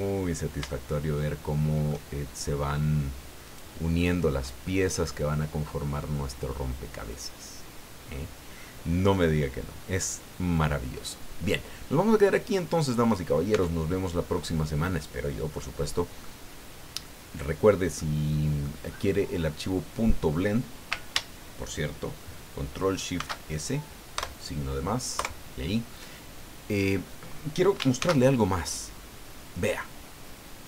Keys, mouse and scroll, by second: 0.1-0.5 scroll up 2, 0.7-2.1 shift+middle drag, 3.4 right click, 4.5 scroll down 1, 8.7 scroll down 1, 9.3 scroll down 1, 10.3-10.9 scroll up 1, 10.9-12.1 scroll down 4, 12.3-13.4 drag, 13.5 Tab, 13.9-14.2 scroll down 2, 14.3-15.8 drag, 15.8-16.1 scroll down 2, 16.2-17.9 drag, 18.0 click, 18.9 scroll up 2, 19.5-20.2 scroll down 4, 23.2 ctrl+shift+s, 24.1 KP_Add, 25.1 KP_Enter, 28.0 ctrl+shift+s.